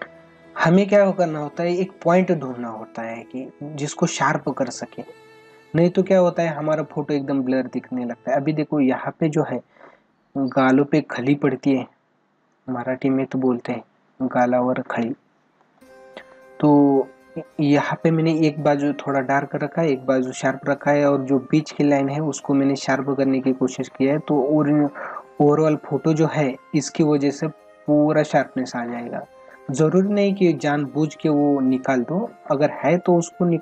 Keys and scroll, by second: 15.6 space, 28.3 ctrl+=.